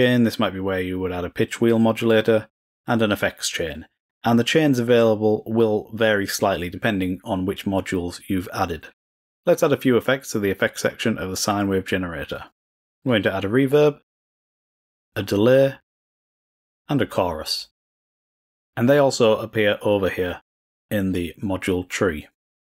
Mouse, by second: 1.9-2.5 drag, 2.6 click, 10.4 click, 13.1 click, 14.3-15.1 drag, 16.5 click, 17.4 click.